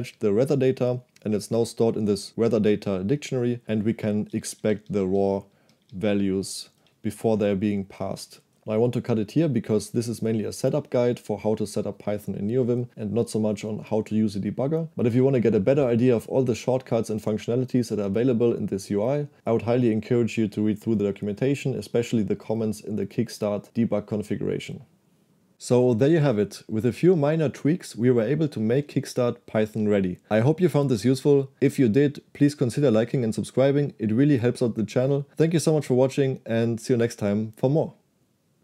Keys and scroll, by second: 8.4 k.